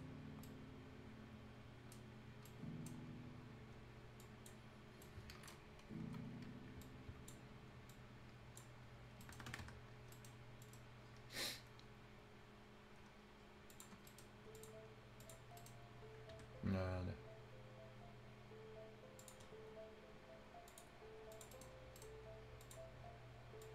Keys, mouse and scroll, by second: 0.0 scroll down 1, 0.4-2.0 right drag, 2.0 scroll up 1, 2.4 right click, 2.8 scroll down 1, 3.2 scroll up 1, 4.1 click, 4.8 scroll down 1, 5.0 right click, 6.0 scroll up 1, 6.8-8.7 drag, 8.7-9.0 scroll down 1, 9.0 scroll up 1, 9.2 right click, 9.3 Escape, 9.3 scroll down 1, 9.4 Escape, 9.6-9.9 scroll up 1, 9.9 scroll down 1, 10.1 right click, 10.3 scroll up 1, 10.6 middle click, 13.7 click, 14.0 right click, 14.5 click, 16.3 Escape, 19.1 click, 20.6 click, 21.5 right click, 21.8 scroll up 1, 21.9 right click, 22.6 click, 22.8 scroll up 1, 23.6 click.